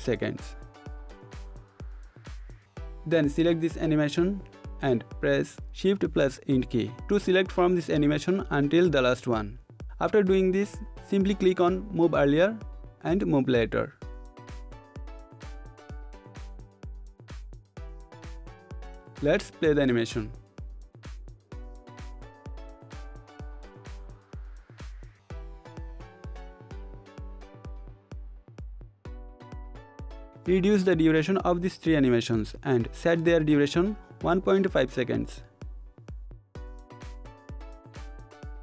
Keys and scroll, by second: 4.3 shift+End, 32.3 shift+Down.